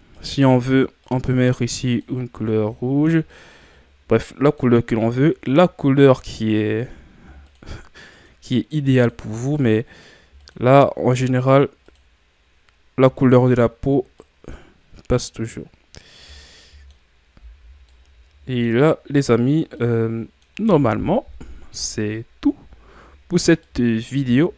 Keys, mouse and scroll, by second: 1.9 click, 16.6-17.3 middle drag, 17.3-17.8 scroll down 2, 17.3 a, 17.8-18.9 middle drag, 18.9-19.8 scroll up 4, 19.8-21.2 middle drag, 21.2 KP_1, 22.2-23.6 scroll down 2, 23.6-24.5 middle drag.